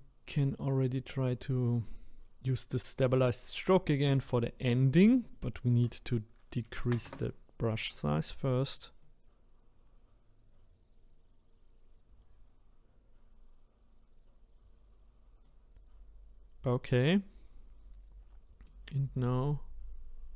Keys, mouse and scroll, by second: 1.1-4.1 drag, 5.1-8.1 drag, 9.0-12.0 drag, 18.6-20.3 middle drag.